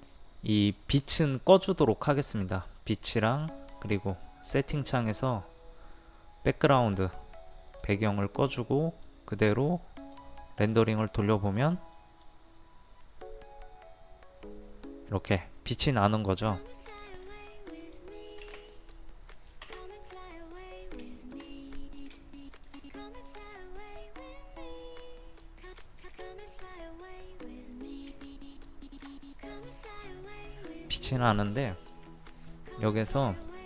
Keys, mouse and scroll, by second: 19.3 middle click, 20.1 scroll up 1, 21.1 shift+scroll up 1, 21.2 middle click, 22.2 shift+middle click, 22.8 middle click, 23.0 middle click, 23.7 scroll up 1, 23.8 scroll down 1, 24.6 scroll up 1, 25.3-25.8 scroll down 1, 25.9-28.1 shift+middle drag, 28.2 shift+middle click, 33.4-33.6 drag.